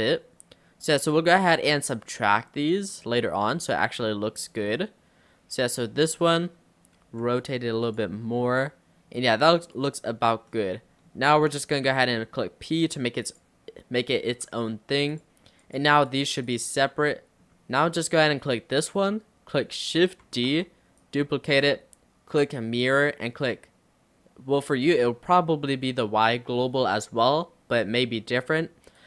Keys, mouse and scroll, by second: 0.2 click, 1.5-7.1 middle drag, 7.1 r, 8.3-9.4 middle drag, 9.4 click, 10.6-11.9 middle drag, 11.9 p, 14.5 Tab, 15.1 click, 15.7 click, 16.1 click, 16.5 click, 16.8 click, 17.2-20.3 middle drag, 20.3 shift+d, 21.5-24.7 right drag.